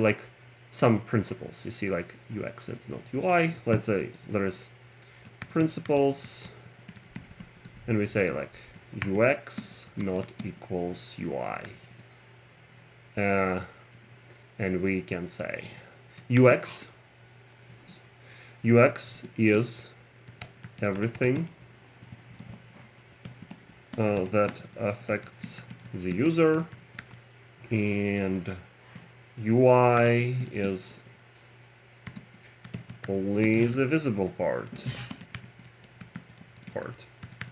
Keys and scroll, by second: 5.2-7.7 typing, 7.7 Tab, 8.8-12.3 typing, 14.0 Return, 15.7 Tab, 16.5 shift+x, 19.3-22.0 typing, 22.2 alt+Left, 22.4 Right, 23.0 Left, 23.3-27.5 typing, 23.5 super+Right, 29.0 Return, 30.1-31.0 typing, 32.2-37.5 typing.